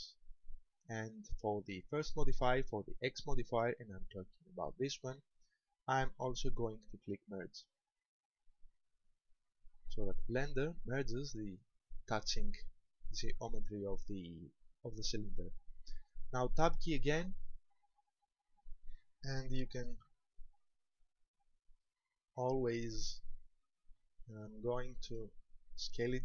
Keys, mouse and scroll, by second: 1.6 click, 7.6 click, 16.8 Tab, 18.0-18.8 scroll down 5, 19.8-21.0 scroll down 3, 21.0 shift+middle click, 21.0 scroll down 1, 22.5 scroll down 1, 24.0 shift+middle click, 24.6-25.8 scroll up 5, 25.9 shift+middle click.